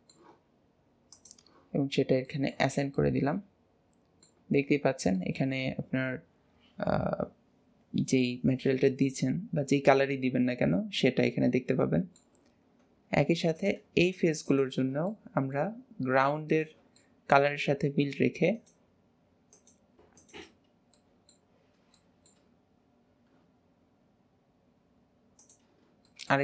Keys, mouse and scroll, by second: 1.1-2.2 drag, 2.2 middle click, 2.6 Tab, 2.9-4.8 middle drag, 4.8 scroll up 1, 5.1-8.2 middle drag, 12.4-12.8 scroll up 2, 12.8 Tab, 13.5 click, 14.0 shift+click, 14.4 shift+click, 15.0-16.4 middle drag, 16.4 shift+click, 17.0 middle click, 17.6-18.5 scroll up 3, 18.5 shift+click, 19.5 shift+click, 20.1 shift+click, 20.6 scroll up 1, 20.7 scroll down 1, 20.9 middle click, 21.6-21.9 scroll down 3, 21.9 shift+middle click, 22.6-25.3 scroll up 1, 25.3 shift+click, 26.0-26.4 middle drag.